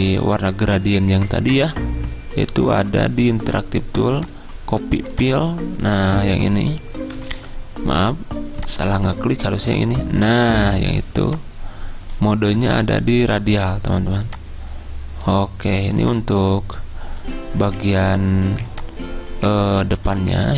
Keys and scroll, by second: 7.4 ctrl+z.